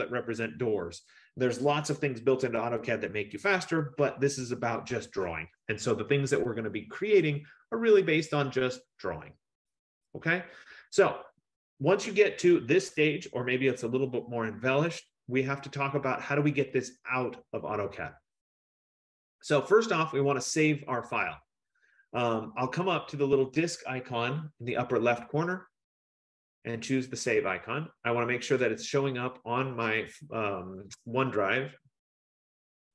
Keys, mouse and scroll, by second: 26.3 click, 28.7 click.